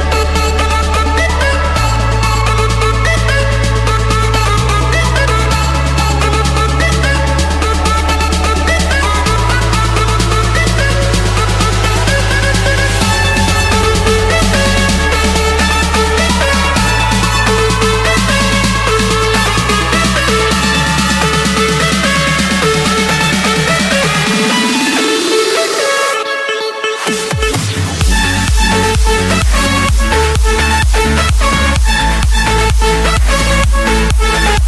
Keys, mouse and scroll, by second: 0.5 middle click, 1.2 middle click, 1.4 middle click, 3.3 Return, 5.4-6.5 drag, 10.2 click, 10.8 Escape, 12.3-13.5 drag, 15.9 click, 16.8 Escape, 18.1-19.2 drag, 19.3-20.4 middle drag, 20.4-21.9 drag, 21.9 middle click, 24.4 click, 25.8 click, 27.4-28.1 scroll, 29.0 scroll, 29.0 middle click, 29.5 Escape, 30.5 c, 31.1 Return, 32.4 click, 34.3 4.